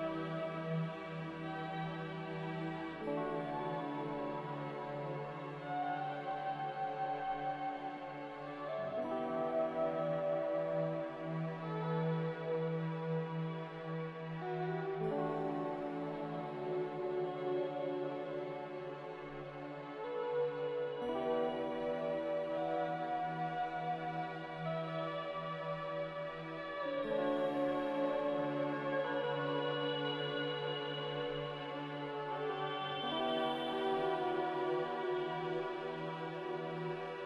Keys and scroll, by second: 0.2 x, 3.0 z, 8.1-10.4 typing, 12.3 n, 20.0 z, 22.8 ctrl+z, 23.1 ctrl+z, 23.5 ctrl+z, 25.2 n, 30.2 a, 31.5-32.4 typing, 34.1-34.9 typing.